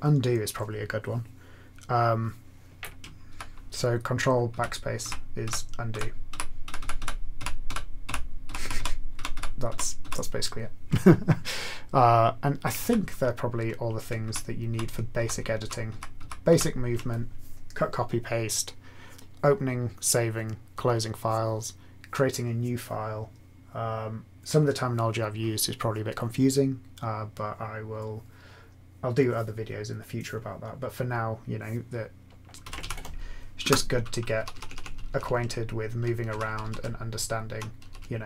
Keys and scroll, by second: 3.3 ctrl+/, 4.5 ctrl+/, 5.0 ctrl+/, 5.4 ctrl+/, 5.9 ctrl+/, 6.6 ctrl+/, 7.3 ctrl+/, 7.6-9.3 ctrl+/, 9.6 ctrl+/, 12.7 ctrl+/, 14.2-16.5 ctrl+/, 32.7 ctrl+x, 32.8 k, 33.6 Return, 34.3 Up, 34.5 Up, 34.6 Up, 34.8 Up, 34.9 Up, 35.2 Up, 35.3 Up, 35.8 Up, 35.9 Up, 36.7 Left, 37.2 Left, 37.8 Down, 37.9 Left.